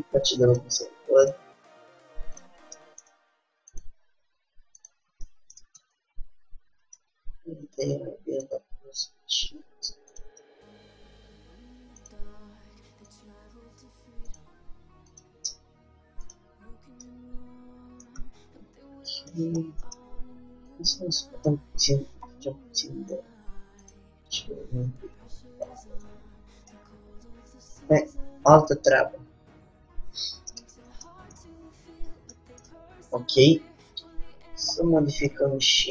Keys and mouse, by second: 1.5-3.0 drag, 2.9 g, 3.0-4.1 middle drag, 4.1-5.5 drag, 4.1 g, 5.5 middle click, 6.0 Tab, 7.3 Tab, 7.9 Tab, 8.1 Tab, 9.2 g, 10.3 click, 10.6 middle click, 12.2-13.8 drag, 12.4 g, 14.4-17.9 drag, 17.9-21.6 middle drag, 20.9-22.7 drag, 22.7-24.0 middle drag, 24.0-26.8 drag, 26.2 Tab, 26.8-28.6 middle drag, 29.9 Tab, 30.8 Tab, 34.3 middle click, 34.8 click, 35.6 middle click, 35.7 click.